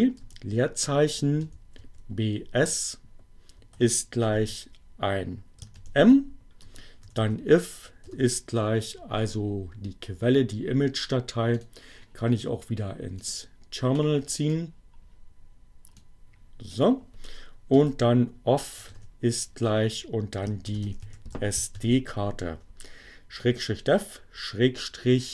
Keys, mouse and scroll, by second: 0.2-1.3 typing, 3.0 shift+o, 4.2 shift+1, 5.5 shift+m, 6.0 space, 6.2 i, 7.2 f, 8.0 shift+o, 11.6 click, 13.2-16.9 drag, 17.4 o, 18.0 f, 18.4 shift+0, 20.5-21.8 typing.